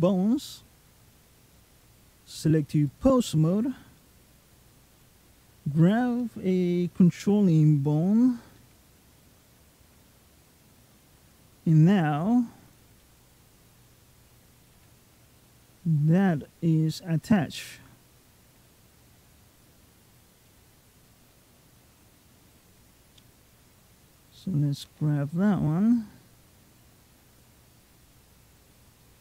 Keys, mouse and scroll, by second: 1.2 click, 3.8 middle click, 4.7 click, 7.2-7.7 scroll up 3, 8.4 g, 12.8 middle click, 14.6 g, 17.4 middle click, 20.3 middle click, 21.0 g, 23.0 middle click, 24.0 click, 24.7 g, 28.6 click, 29.1 g.